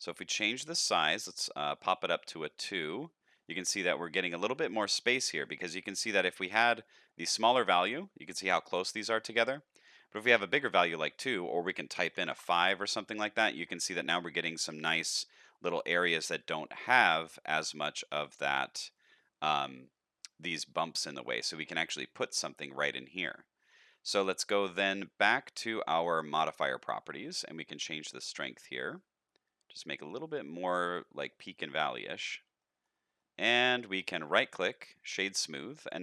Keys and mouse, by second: 1.9-3.4 middle drag, 3.9 middle drag, 5.0 shift+middle drag, 5.6 middle click, 6.7-10.7 drag, 11.2-12.8 drag, 14.0 middle click, 16.5 shift+middle click, 18.4 middle click, 19.2 shift+middle click, 21.1 middle click, 27.5-31.8 shift+drag, 32.6 shift+middle drag, 33.1 middle click, 33.9 shift+middle click, 34.1-34.9 right drag, 35.4 shift+middle click, 35.7-36.0 middle drag.